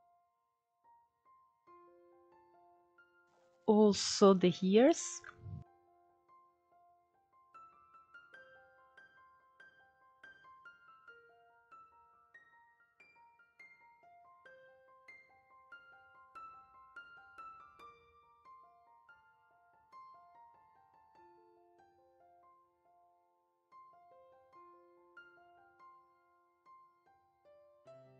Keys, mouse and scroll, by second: 0.7-1.5 scroll up 1, 1.5 middle click, 2.3-3.2 scroll up 2, 3.2 click, 3.7 alt+shift+click, 4.2-6.3 middle drag, 6.3-6.7 scroll up 1, 6.7 scroll down 1, 6.8 middle click, 7.6 ctrl+e, 8.5 click, 8.8 scroll down 1, 8.9-11.1 middle drag, 11.1 scroll up 2, 11.7 click, 12.1 alt+shift+click, 13.0 ctrl+e, 13.8-14.7 scroll down 4, 14.7 click, 15.0-16.0 middle drag, 16.0 scroll up 3, 16.3-17.4 shift+middle drag, 17.4 alt+shift+click, 17.9-18.7 scroll down 1, 18.7 ctrl+e, 19.9 click, 20.3 middle click, 21.3-21.7 scroll up 1, 21.7 click, 23.4 ctrl+e, 24.3 click, 24.8 scroll down 1, 24.8-26.1 middle drag, 26.1-26.6 scroll up 2, 26.6 click, 27.0-28.1 middle drag.